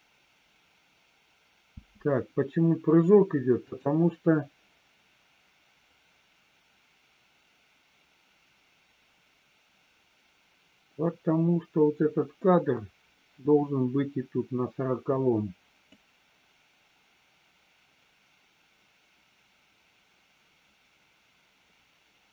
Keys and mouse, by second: 1.7 space, 3.6 click, 15.8-22.3 drag.